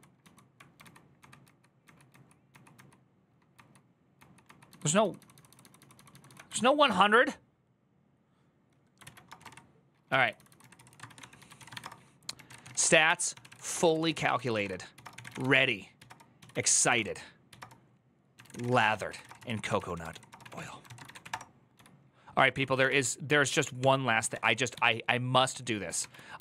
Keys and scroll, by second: 0.6 ctrl+k, 1.0 ctrl+k, 1.2 ctrl+k, 1.6 ctrl+k, 4.4 ctrl+j, 4.6 ctrl+j, 4.8 ctrl+j, 5.0 ctrl+j, 5.9 ctrl+j, 6.3 ctrl+j, 8.8 alt++, 8.8 alt+{, 9.1-24.7 typing, 22.3 ctrl+w, 23.5 ctrl+t, 25.8 ctrl++, 26.2 ctrl++.